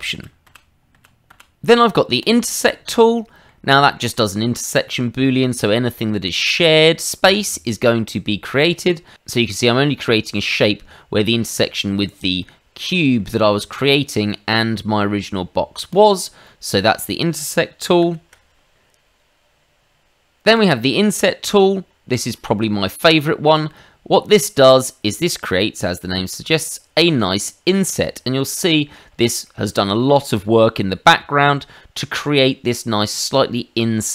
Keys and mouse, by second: 0.1 ctrl+z, 0.4 ctrl+z, 0.9 ctrl+z, 1.3 ctrl+z, 2.2 click, 3.1 middle click, 3.7 shift+middle click, 4.1 middle click, 6.4 click, 7.6 middle click, 12.4 middle click, 14.2 middle click, 15.9 click, 16.4 middle click, 17.0 shift+middle click, 18.0 ctrl+z, 20.5 click, 22.3 shift+middle click, 22.9 middle click, 24.3 click, 27.8 click, 28.7 shift+middle click, 29.4 middle click, 29.9 shift+middle click, 30.6 middle click.